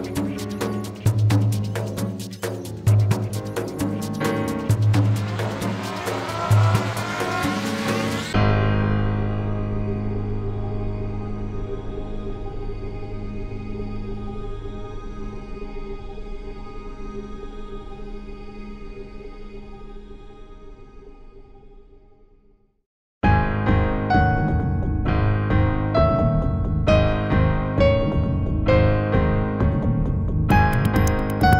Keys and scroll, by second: 15.2 w.